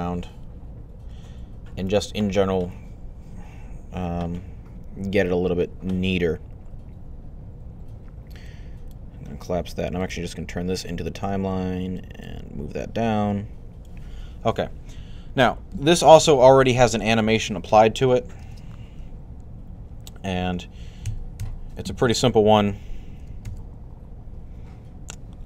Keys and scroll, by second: 16.1 Left, 20.9-21.2 typing, 23.3 alt+a.